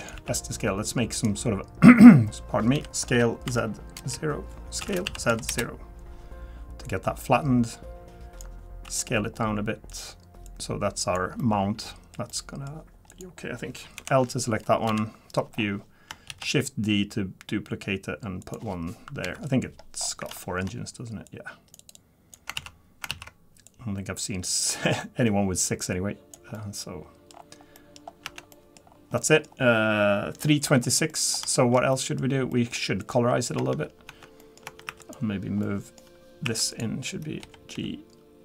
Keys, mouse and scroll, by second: 0.1 s, 6.8 click, 8.8 s, 10.4 click, 11.4 middle click, 12.3 middle click, 13.1 click, 14.0 l, 14.9 KP_7, 15.5-16.1 scroll down 2, 16.1 scroll down 2, 16.3 shift+d, 19.2 KP_3, 20.0-20.4 scroll up 6, 20.4 shift+middle click, 21.3 click, 21.8 click, 22.6 ctrl+z, 23.1 ctrl+z, 23.7 click, 25.0 click, 26.5 middle click, 27.3-27.6 scroll down 3, 27.7 middle click, 28.0 scroll down 1, 28.2 Tab, 28.5 middle click, 28.6-29.2 scroll down 2, 29.2 middle click, 30.6-31.0 scroll up 3, 31.1 middle click, 31.5 shift+middle click, 31.9 middle click, 32.5 middle click, 32.7 shift+middle click, 33.0 click, 33.6 Tab, 34.1 Tab, 34.4 middle click, 34.6 Tab, 34.9 1, 35.0 click, 35.6 middle click, 36.4 1, 36.7 click, 37.1 Tab, 37.4 g.